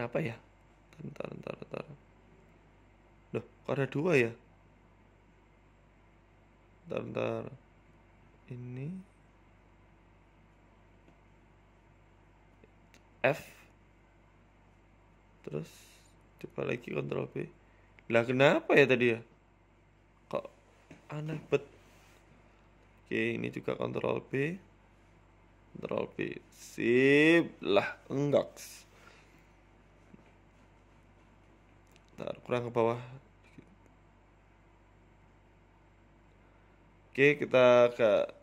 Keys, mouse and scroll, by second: 1.3 ctrl+z, 1.7 ctrl+z, 2.6 click, 3.3 right click, 4.3 ctrl+z, 4.6 ctrl+right click, 5.2 right click, 5.9 Delete, 7.1 ctrl+z, 7.4 right click, 8.1 Delete, 8.8 middle click, 9.3 right click, 9.7 middle click, 10.6 click, 11.2 right click, 11.4 shift+right click, 11.8 right click, 12.2 right click, 12.5 shift+right click, 15.8 f, 16.6 right click, 17.6 click, 18.1 right click, 18.6 ctrl+b, 23.4 KP_1, 23.8 shift+middle click, 24.1-24.4 scroll up 1, 24.4 click, 25.0 ctrl+b, 27.0 click, 27.5 ctrl+b, 28.4 Tab, 28.7 middle click, 28.9 scroll down 5, 29.2 middle click, 29.7 scroll down 2, 29.9 middle click, 30.7 middle click, 31.6 Tab, 32.0 KP_1, 32.6 click, 33.5 g, 34.3 Tab, 34.4 middle click, 34.9 middle click, 35.1 Tab, 35.4 click, 36.2 y, 36.7 x, 37.2 ctrl+z, 37.9 g.